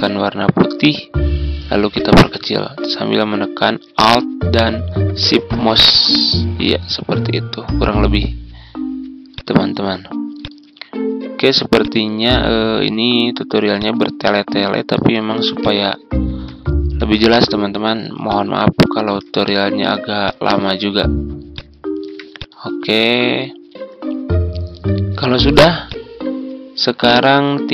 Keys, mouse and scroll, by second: 13.7 ctrl+shift+click, 17.2 ctrl+g, 18.2 ctrl+click, 20.2 ctrl+shift+click, 22.9-23.3 ctrl+scroll down 1, 24.0-25.3 ctrl+scroll down 2, 25.3 ctrl+z, 25.8-27.7 drag.